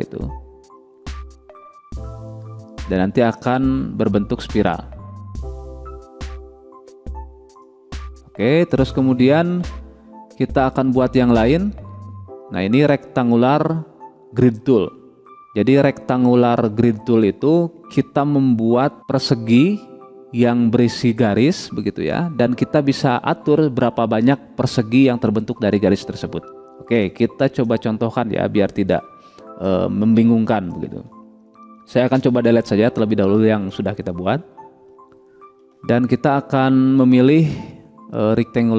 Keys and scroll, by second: 32.6 Delete, 35.4 Delete.